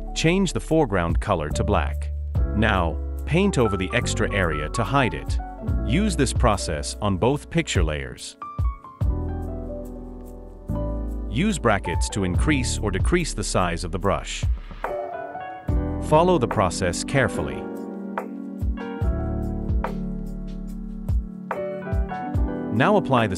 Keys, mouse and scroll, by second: 12.2 ], 12.4 ], 12.7 ].